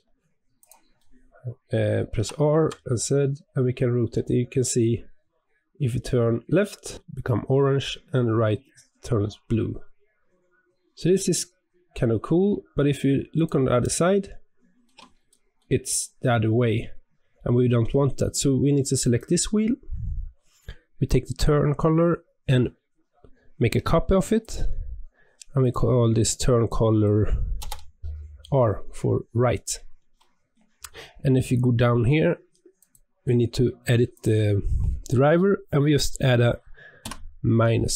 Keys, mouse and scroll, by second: 0.9-2.1 middle drag, 2.1 r, 13.7-18.4 middle drag, 18.9 click, 24.3-28.0 drag, 30.5-31.3 scroll down 13, 32.7-35.8 drag.